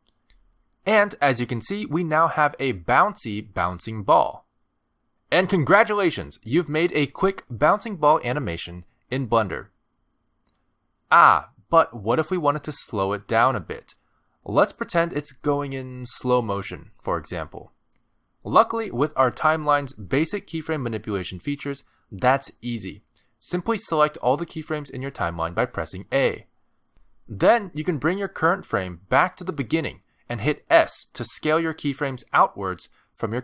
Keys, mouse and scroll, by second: 0.8 space, 15.5 middle click, 16.7 a, 18.9-19.5 scroll down 1, 23.9 space, 24.3 click, 24.8 click, 25.8 a, 28.0 click, 31.8 s.